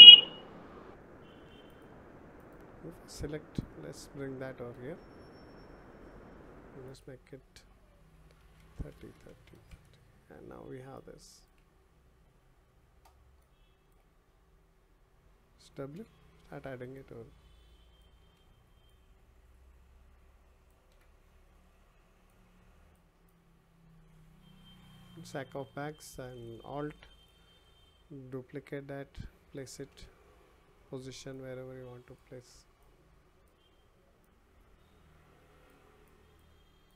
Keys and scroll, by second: 18.2 e, 32.3 ctrl+z.